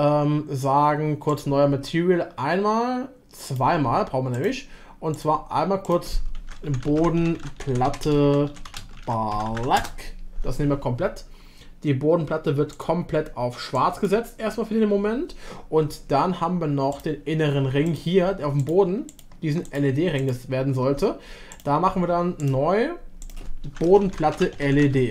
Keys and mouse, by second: 3.5 click, 4.3 click, 6.2-10.6 shift+drag, 17.8 click, 18.6 alt+click, 19.1 alt+click, 19.7 click, 20.2 alt+click, 21.5 click, 22.4 click, 23.2-25.1 drag.